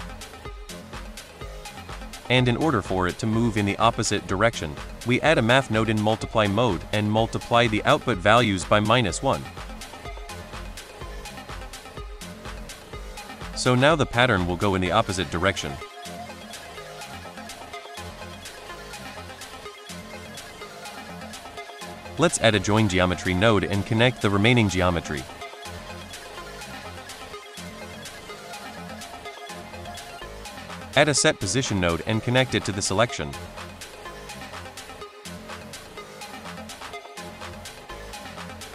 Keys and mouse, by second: 0.3 space, 1.7 space, 2.1 middle drag, 2.8-3.2 drag, 3.6 drag, 4.0 click, 4.2 shift+a, 6.1 click, 6.3 middle drag, 7.2-8.1 drag, 8.4 click, 10.1 middle drag, 10.5 drag, 11.3-12.1 drag, 12.5 click, 12.8 space, 15.0 space, 15.6 middle drag, 17.3-17.6 middle drag, 18.9 \, 20.7 middle drag, 21.3 middle drag, 22.1 shift+a, 24.1 click, 24.4 middle click, 24.7 click, 25.2-25.6 drag, 25.8 click, 26.1 middle drag, 26.7 middle click, 28.0 middle drag, 28.5 click, 29.8 middle drag, 30.3 shift+a, 33.4 click, 33.8-34.2 drag, 34.5 middle drag, 36.2 middle drag, 36.7-37.6 drag, 37.8 middle drag.